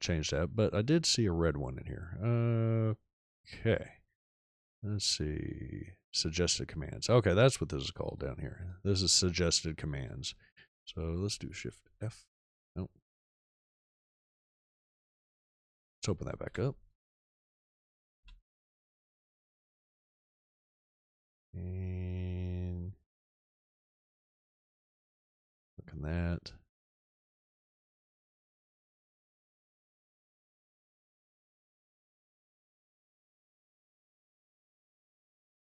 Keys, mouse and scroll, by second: 9.9 click, 11.9 shift+f, 16.4 f, 17.5 s, 18.1 u.